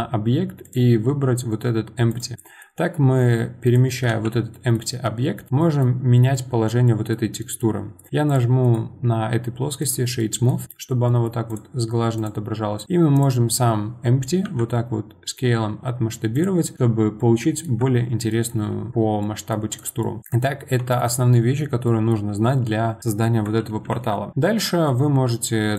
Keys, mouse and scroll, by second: 2.3-3.6 middle drag, 3.6 click, 4.1 g, 5.6-8.3 middle drag, 8.3 click, 8.6-10.2 right drag, 10.2-11.5 middle drag, 11.5 click, 12.1 click, 12.8 click, 13.1 click, 14.4 s, 16.6 middle click, 16.9 scroll down 2, 17.2-19.7 middle drag, 19.7 click, 20.0-23.9 middle drag, 23.9 shift+a.